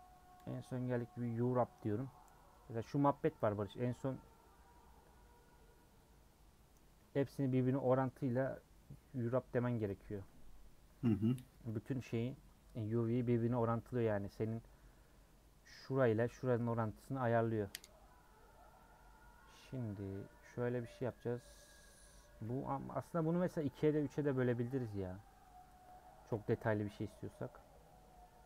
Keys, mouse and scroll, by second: 2.0 u, 4.2-6.9 middle drag, 6.9 scroll up 1, 7.7-9.7 middle drag, 9.7 Tab, 10.3 Tab, 13.9 middle click, 14.5 scroll up 2, 21.7 click, 22.5 scroll down 1, 23.0 Tab, 23.1 scroll down 2, 23.6 click, 23.8 middle click, 24.1 scroll up 2, 24.5 scroll down 1, 24.7-26.5 middle drag, 26.5 a, 26.8 Tab, 27.2 a.